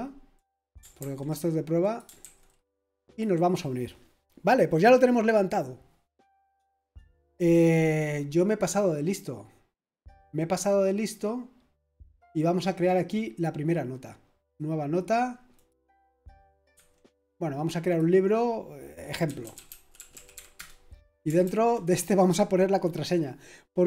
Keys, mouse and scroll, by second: 0.3 click, 0.8 click, 0.8 typing, 1.0 ctrl+v, 1.8 click, 2.2 ctrl+v, 3.0 click, 14.4 click, 15.5 click, 16.7 Escape, 17.8 click, 19.0-20.8 typing, 21.4 ctrl+v.